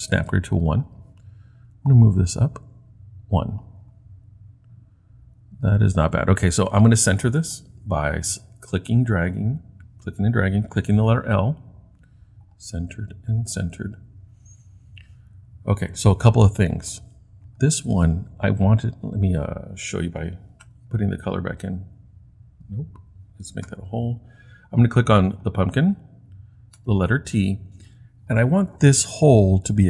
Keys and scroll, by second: 11.0 i, 20.6 t, 23.7 h, 26.8 t.